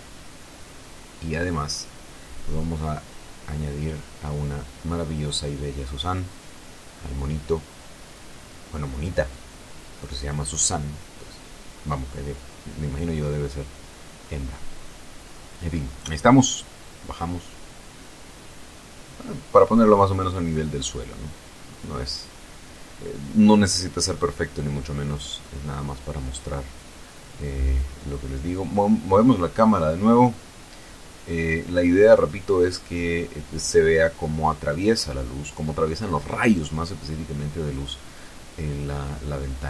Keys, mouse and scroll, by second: 0.6 shift+a, 2.8 click, 4.7 r, 5.4 z, 8.7 click, 9.9-11.8 drag, 12.4 click, 13.7-14.7 typing, 16.4 click, 17.3-20.1 drag, 20.6 r, 21.3 y, 22.9 click, 23.8 s, 24.4 click, 25.1 s, 25.8 click, 27.6 right click, 28.1 right click, 29.4 g, 35.9 click, 37.2 right click, 38.6 ctrl+2.